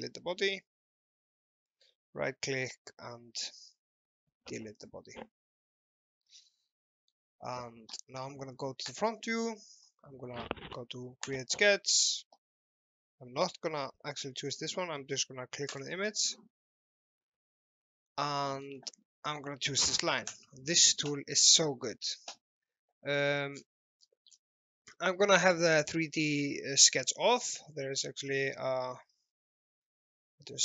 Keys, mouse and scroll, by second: 1.6 right click, 4.8 click, 5.7-6.7 scroll up 1, 6.8 alt+middle click, 8.9 click, 15.7 click, 18.1 alt+middle click, 20.3 click, 23.6-24.1 scroll down 1, 28.2 alt+Num_Lock, 28.4 alt+middle click, 29.3 l.